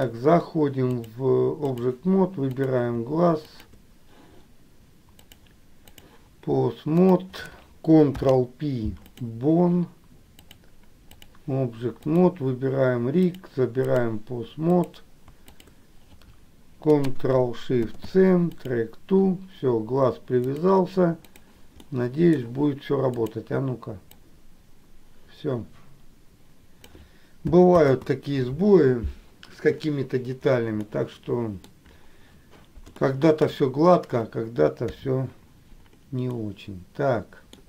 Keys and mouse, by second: 1.1-2.1 drag, 2.9 click, 5.3 click, 7.1 click, 8.2 ctrl+p, 10.6 click, 12.2 click, 13.4 click, 14.9 click, 15.6 shift+click, 18.2 shift+s, 21.5 click, 22.0 middle click, 23.3 click, 24.3-27.2 drag, 27.7 ctrl+click, 31.0 middle click, 33.1 shift+middle click, 35.0 KP_4, 36.5-37.6 middle drag.